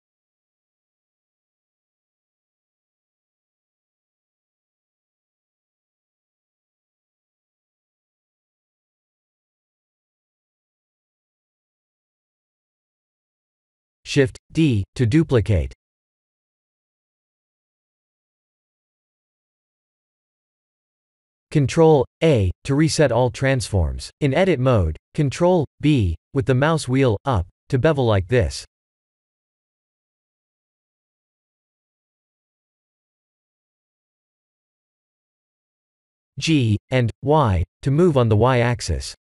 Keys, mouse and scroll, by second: 2.2-2.6 scroll up 5, 2.9 middle click, 6.2 s, 8.5 middle click, 12.4 middle click, 14.6 shift+d, 16.6 click, 17.1 middle click, 17.3 middle click, 17.4 middle click, 18.2 middle click, 19.2-19.6 scroll up 3, 19.6 middle click, 20.4 ctrl+a, 21.8 shift+middle click, 22.8 Tab, 23.6 3, 24.5 ctrl+b, 28.6 Tab, 29.3 middle click, 31.3 click, 31.7 right click, 33.8 click, 34.2 middle click, 34.9 Tab, 35.4 3, 35.6 2, 36.1 click, 36.8 g, 39.1 Tab.